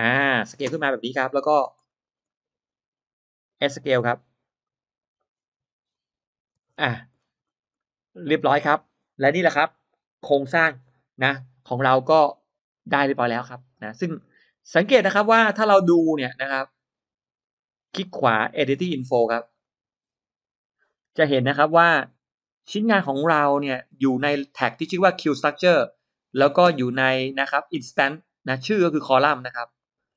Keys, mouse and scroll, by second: 0.1 click, 0.5-1.1 scroll down 1, 1.1 middle click, 1.4-2.8 scroll up 3, 1.9 click, 2.1 middle click, 2.5 middle click, 3.1 middle click, 3.4 middle click, 3.5 scroll up 1, 3.8 s, 4.5 click, 4.6 s, 5.8 click, 6.4 space, 6.5 middle click, 6.8-7.1 scroll down 1, 7.0 space, 7.3 click, 7.7 middle click, 8.0-8.4 scroll down 1, 11.5 middle click, 12.1-12.5 scroll down 1, 12.5-12.9 scroll up 1, 13.4 click, 13.7-14.7 scroll down 2, 14.1 middle click, 15.0-15.3 scroll up 1, 15.9 click, 17.3 click, 18.1 right click, 19.5 click, 22.5-22.9 scroll down 2, 22.9-23.7 scroll up 4, 24.2-24.5 scroll down 1, 29.2-29.5 scroll down 2, 29.5 click, 29.9-30.1 scroll up 1.